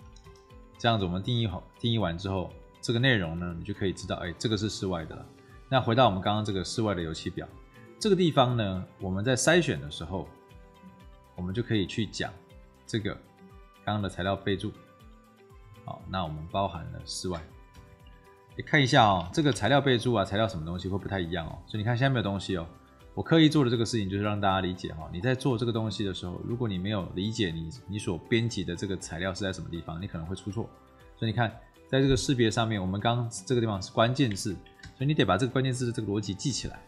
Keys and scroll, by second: 0.0 Return, 17.6 g, 17.8 4, 19.2 4, 19.4 1, 19.5 Escape, 34.7 ctrl+c.